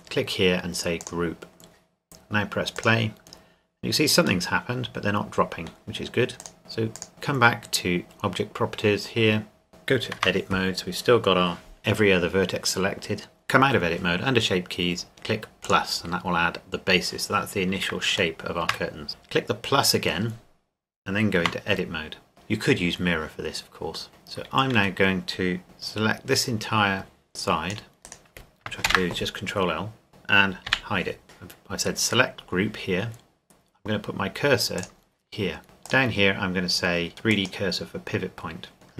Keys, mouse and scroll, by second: 4.5 middle click, 6.4 click, 9.7 click, 10.2 Tab, 13.4 Tab, 17.9 click, 18.4 shift+middle drag, 19.8 click, 21.4 Tab, 24.8 a, 28.0 click, 28.0 right click, 28.9 ctrl+l, 30.7 h, 31.2 click, 34.8 click.